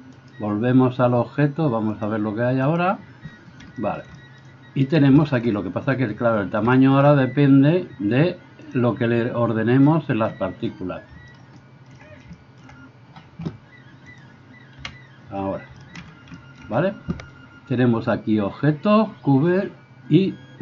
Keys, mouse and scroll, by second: 0.2 right click, 0.4-2.7 middle drag, 2.7 click, 3.3-4.9 middle drag, 4.9 right click, 5.1-11.4 shift+middle drag, 11.6-14.1 shift+middle drag, 14.1 click, 14.3-20.6 middle drag, 14.8 KP_1.